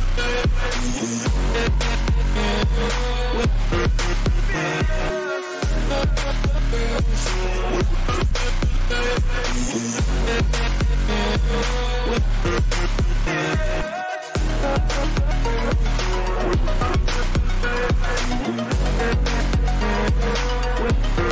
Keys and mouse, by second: 2.2 right click, 4.1 click, 6.2 ctrl+t, 8.0-15.0 drag, 15.0 ctrl+=, 17.1-21.3 drag.